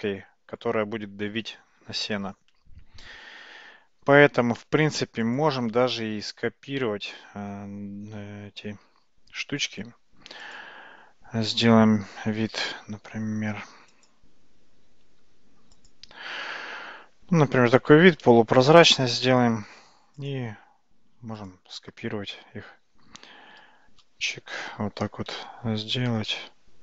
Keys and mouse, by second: 5.3 click, 10.6 `, 15.1 `, 18.1 alt+z, 20.2 click, 23.9 shift+d.